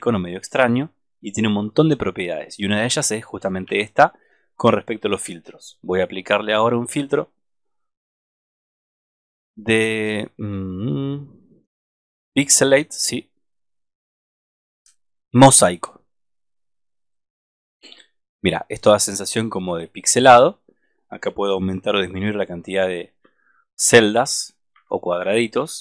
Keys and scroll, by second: 3.6 super+-.